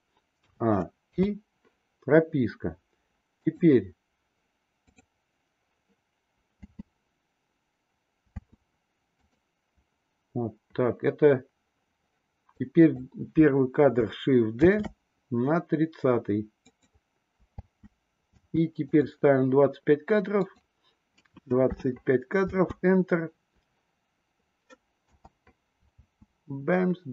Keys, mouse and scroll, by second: 0.3 a, 1.0 i, 3.4 click, 4.9 click, 6.5 space, 8.4 space, 9.2 click, 12.4-12.8 drag, 14.5 shift+d, 17.5 space, 18.4 space, 18.9 click, 20.3-25.4 drag, 25.8 space.